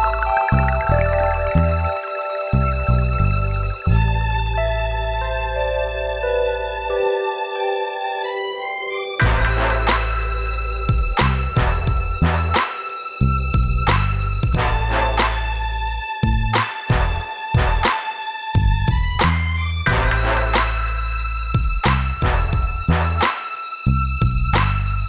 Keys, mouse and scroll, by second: 7.1 middle click, 7.5 scroll down 2, 16.7 click, 16.8 click, 20.8 middle click, 21.0 middle click.